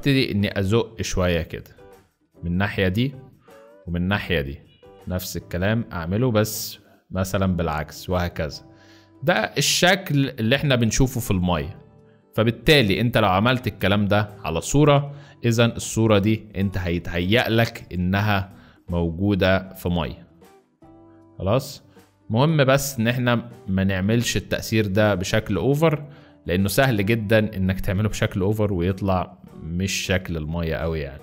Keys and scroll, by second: 13.7 space, 22.7 space.